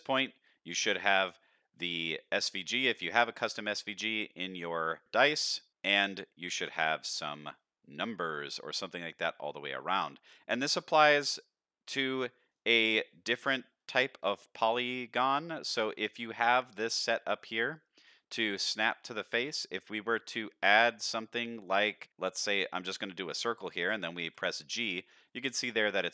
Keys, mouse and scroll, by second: 1.1 middle click, 2.6-3.1 middle drag, 3.3 middle drag, 4.1-4.8 middle drag, 5.4-5.7 middle drag, 6.2-7.5 middle drag, 7.9-8.4 middle drag, 8.7-9.1 middle drag, 9.4-10.6 middle drag, 12.5 drag, 13.0-13.3 scroll down 2, 13.3 shift+middle click, 13.7-15.5 scroll up 1, 15.7 middle drag, 17.0 drag, 19.0 middle drag, 19.3 shift+a, 22.8-23.4 middle drag, 24.3 g, 25.5 middle click, 26.0 s.